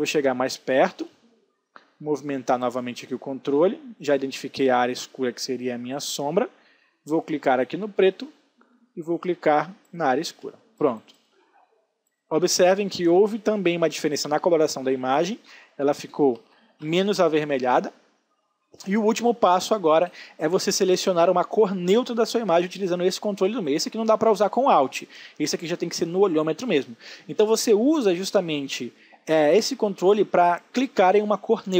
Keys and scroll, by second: 12.6 ctrl+z.